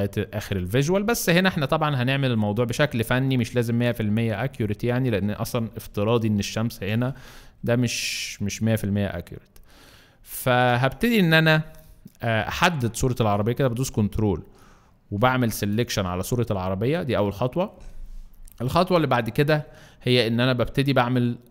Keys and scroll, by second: 15.2 ctrl+alt+space.